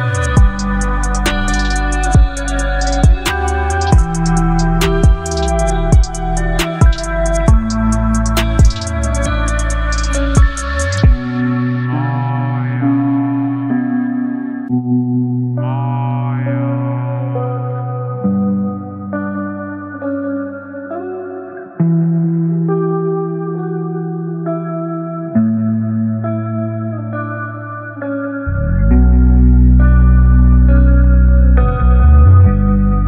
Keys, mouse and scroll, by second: 1.0 ctrl+0, 3.4 shift+click, 4.9 v, 5.1 ctrl+t, 7.0-7.6 drag, 13.3-14.2 alt+drag, 18.5 click, 21.6 click, 29.7 click, 30.7 alt+scroll up 1, 32.6 click.